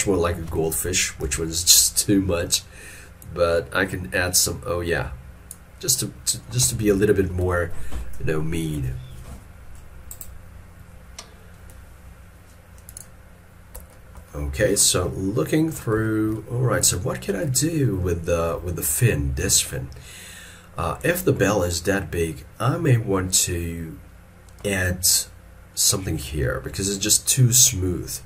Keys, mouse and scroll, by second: 1.3 ctrl+z, 6.0 middle click, 7.6 shift+middle click, 14.3 middle click, 15.2 ctrl+middle click, 16.1 shift+middle click, 16.4 shift+middle click, 18.7 shift+middle click.